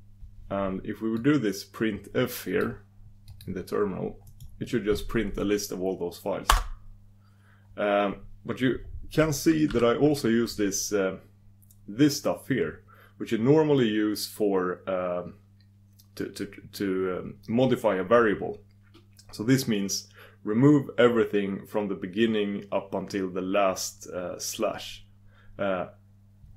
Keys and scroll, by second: 1.1 super+d.